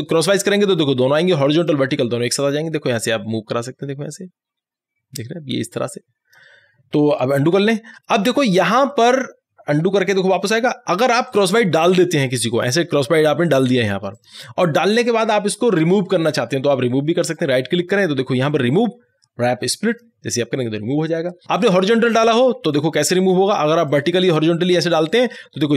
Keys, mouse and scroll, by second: 7.4 ctrl+z, 9.9 ctrl+z, 11.3 right click, 12.6 click, 17.3 right click, 20.0 click, 22.8 click, 22.8 right click, 24.0 click.